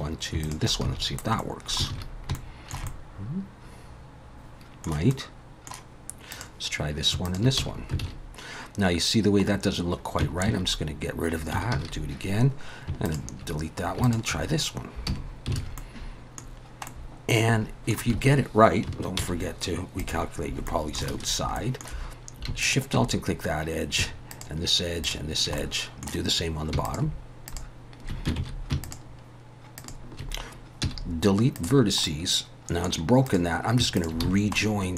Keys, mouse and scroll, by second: 0.4 shift+click, 0.8 f, 1.4 middle click, 1.9 alt+a, 2.3 shift+middle click, 2.9 middle click, 5.1 middle click, 6.3 click, 7.3 shift+click, 7.6 f, 8.0 alt+a, 10.5 ctrl+z, 11.7 ctrl+z, 13.1 shift+click, 14.3 shift+click, 15.1 f, 15.6 alt+a, 15.8 middle click, 16.6 scroll down 2, 16.9 middle click, 18.1 a, 19.2 alt+n, 20.5 scroll up 2, 20.7 middle click, 21.1 alt+a, 21.6 middle click, 22.6 alt+shift+click, 24.3 alt+shift+click, 25.0 alt+shift+click, 25.6 middle click, 26.8 alt+shift+click, 27.5 alt+shift+click, 28.4 ctrl+z, 28.8 alt+shift+click, 29.8 alt+shift+click, 30.8 x, 32.0 middle click, 33.3 click, 34.0 shift+click, 34.3 f, 34.6 middle click.